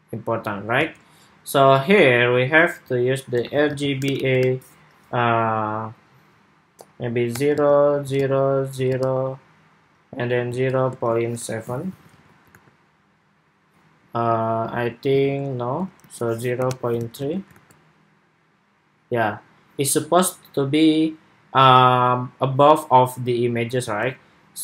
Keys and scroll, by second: 0.7 super+Tab, 11.6 super+s, 11.9 super+Tab, 12.3 super+r, 14.9 super+Tab, 16.7 super+s, 17.0 super+Tab, 17.3 super+r, 23.6 super+Tab.